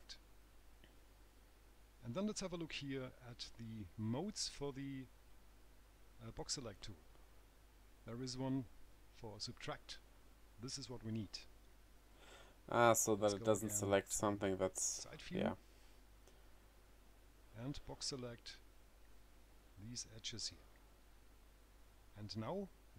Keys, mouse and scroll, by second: 12.2 click, 14.9 click, 16.2 middle click, 18.3 click, 19.3 click, 22.7 right click.